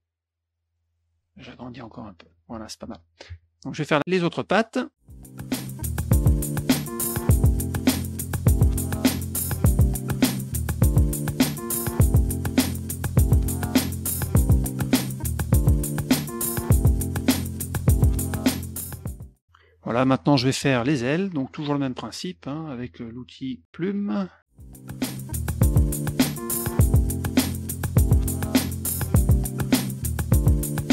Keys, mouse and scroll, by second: 1.7 shift+click, 2.8 F1, 3.9 middle click, 5.1 click, 5.4 click, 5.6 click, 5.9 click, 6.1 click, 6.3 click, 6.5 click, 6.6 click, 6.9 Return, 8.0 shift+click, 8.0 shift+click, 8.1 shift+click, 8.2 shift+click, 8.4 shift+click, 8.5 shift+click, 8.5 shift+click, 8.6 shift+click, 8.7 shift+click, 8.8 shift+click, 8.9 shift+click, 9.0 shift+click, 9.0 shift+click, 9.2 middle click, 9.3 shift+click, 9.4 shift+click, 9.6 click, 9.8 middle click, 10.2 click, 10.3 middle click, 10.4 F2, 10.7 click, 11.0 click, 11.2 middle click, 11.4 click, 11.6 middle click, 11.9 click, 12.2 middle click, 12.6 click, 12.9 click, 13.2 click, 13.4 click, 13.6 click, 14.0 click, 14.6 Return, 15.1 click, 15.6 shift+F2, 16.0 shift+click, 16.1 shift+click, 16.2 shift+click, 16.2 shift+click, 16.3 shift+click, 16.5 shift+click, 16.6 shift+click, 16.7 shift+click, 17.0 F2, 17.2 click, 17.4 middle click, 17.8 click, 18.0 middle click, 18.2 click, 18.4 click, 18.6 F1, 18.8 middle click, 18.9 middle click, 19.0 drag, 19.3 middle click, 21.5 middle click, 21.8 middle click, 23.6 click, 23.9 middle click, 24.5 click, 25.0 click, 25.4 click, 25.6 click, 25.9 click, 26.1 Return, 26.5 click, 26.8 click, 27.4 drag, 28.3 click, 28.6 drag, 29.6 click.